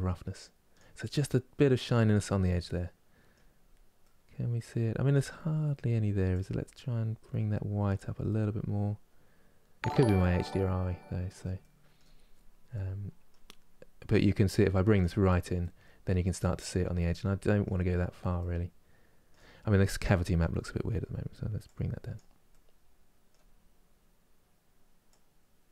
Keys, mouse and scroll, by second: 0.9-3.3 middle drag, 3.3 scroll down 2, 3.7-6.0 middle drag, 6.0-8.0 drag, 8.0-11.0 middle drag, 11.3 middle click, 12.0 scroll up 2, 12.4-13.9 middle drag, 13.9-15.3 drag, 15.3-17.7 middle drag, 17.7-18.1 scroll down 1, 18.1-21.4 middle drag, 21.4 click, 22.2-23.2 middle drag, 23.2-24.4 scroll up 2, 24.4-24.9 scroll up 1, 24.9 click.